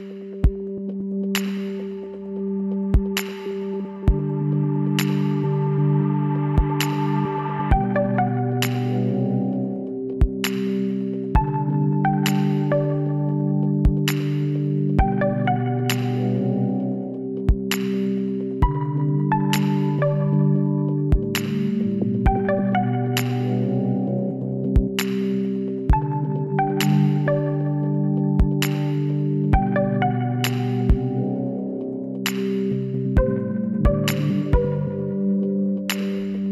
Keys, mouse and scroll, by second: 0.2 KP_7, 0.4 middle click, 1.9-3.4 drag, 6.7 middle click, 6.9 click, 7.3-10.6 middle drag, 10.6-12.2 drag, 11.7 right click, 13.4 b, 15.3 b, 18.3 z, 18.6 middle click, 19.9 middle click, 21.3 s, 27.2-31.2 middle drag, 29.1 Tab, 34.0 KP_3, 34.9 middle click, 35.5 middle click.